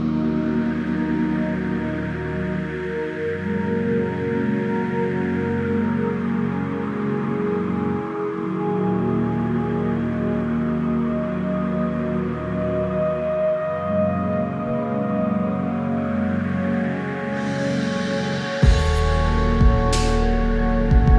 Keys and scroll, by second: 0.9 ctrl+-, 1.4 space, 7.7 ctrl+z, 11.2 Up, 11.8 Down, 16.4 ctrl+=, 17.4 ctrl+z, 19.1 ctrl+z.